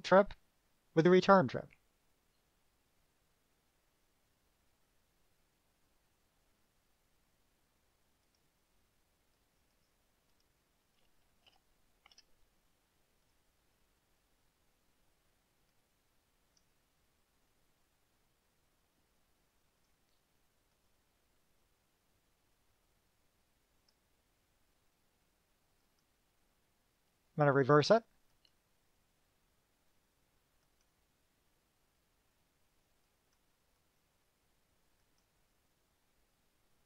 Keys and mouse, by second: 7.4 drag, 8.4 click, 9.5 click, 9.9 right click, 10.6 click, 11.6 shift+p, 12.2 5, 13.4 drag, 13.8 click, 15.9-16.9 drag, 20.0 click, 20.9 click, 24.0 click, 26.0 click, 28.5 click, 30.8 click, 33.2 click, 34.1 click, 35.2 click.